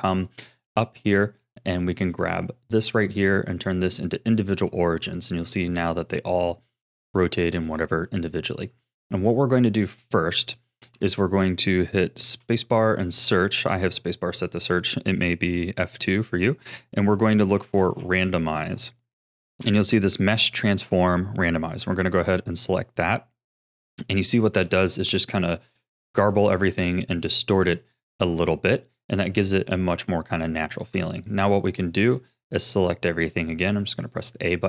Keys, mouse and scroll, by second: 2.1-5.1 drag, 5.3 r, 8.8-9.6 scroll up 4, 9.6-10.1 scroll down 1, 10.1-12.3 middle drag, 12.3 space, 23.5-24.6 scroll down 2, 24.6 a, 25.1-26.7 middle drag, 26.7-27.3 scroll up 3, 27.3-28.8 middle drag, 28.8-29.4 scroll down 4, 29.4-31.8 middle drag, 31.8 a, 32.7 middle click, 33.4-34.0 scroll up 5, 34.0-34.6 shift+middle drag.